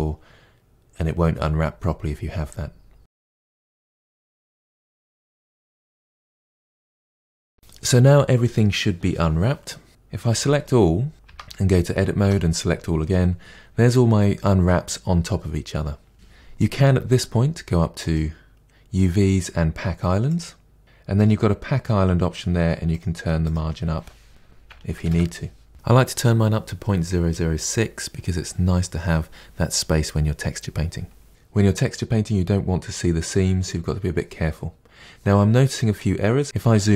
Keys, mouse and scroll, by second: 3.0 Tab, 3.1 Tab, 3.4 ctrl+a, 3.7 Tab, 4.0 u, 4.1 Tab, 4.2 KP_Divide, 4.5 middle click, 4.6 scroll down 3, 4.7-5.3 middle drag, 5.4-5.9 scroll down 5, 5.9-6.5 middle drag, 6.6-7.2 scroll down 3, 6.7 middle click, 7.2-10.3 shift+middle drag, 10.3 a, 11.3 Tab, 12.3 a, 25.1-36.9 drag.